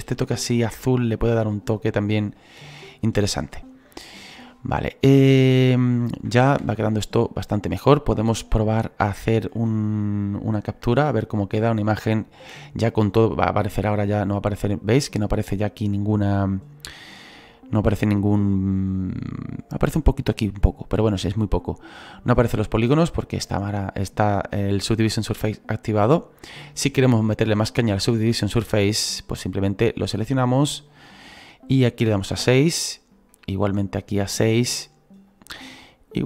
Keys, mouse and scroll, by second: 6.6 space, 8.3-26.7 drag, 26.7-36.2 right drag.